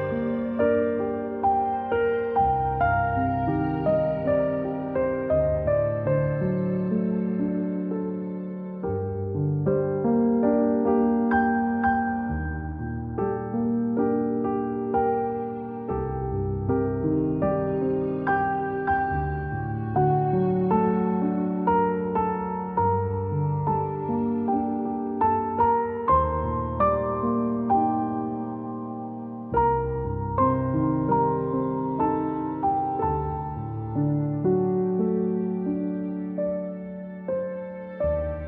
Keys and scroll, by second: 0.0-0.3 typing, 4.0 z, 5.9 g, 8.0 v, 9.1-10.8 typing, 14.2 z, 15.5 v, 18.5 z, 21.8-23.4 typing, 25.7 a, 35.5-36.2 typing, 37.4-38.1 space.